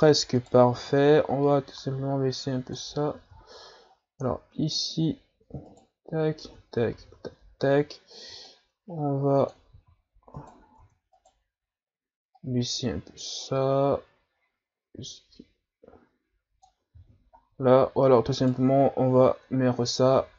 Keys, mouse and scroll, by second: 0.4 right click, 1.5-3.2 drag, 3.2 ctrl+z, 4.3-4.7 scroll up 2, 5.7 shift+right click, 6.4 Tab, 6.9 a, 7.1 a, 8.4-9.7 drag, 9.7 ctrl+z, 10.4 right click, 10.8 Tab, 11.2 right click, 12.3-15.4 drag, 17.0 ctrl+z, 17.4-18.4 scroll down 3, 18.4 right click, 19.6-20.1 scroll up 2, 20.1 a.